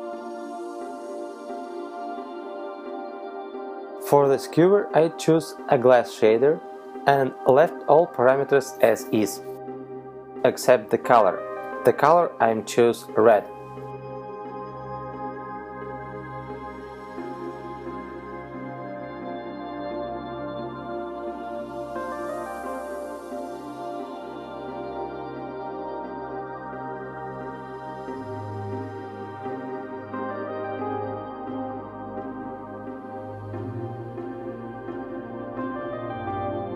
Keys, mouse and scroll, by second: 3.3 right click, 5.2 click, 6.4 click, 8.9 click, 18.0 click, 31.0 click, 33.4 ctrl+c, 34.7 ctrl+v, 36.4 right click.